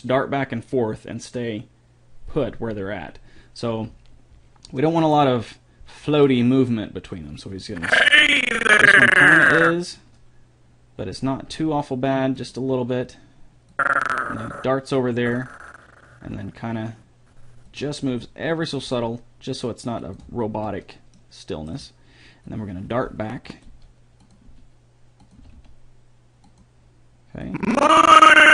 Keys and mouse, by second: 4.0 middle click, 7.4-9.2 drag, 11.7 g, 13.9-15.7 drag, 18.2 r, 19.1 g, 22.8-23.9 drag, 23.9 g, 24.7 r, 25.6 r, 27.6 click.